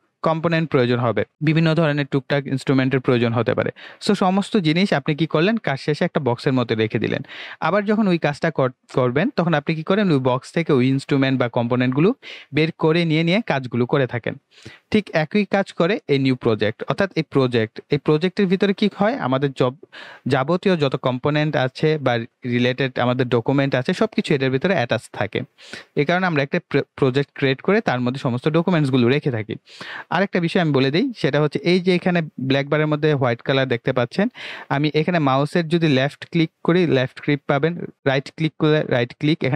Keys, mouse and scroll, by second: 29.2-37.9 drag, 37.9 right click.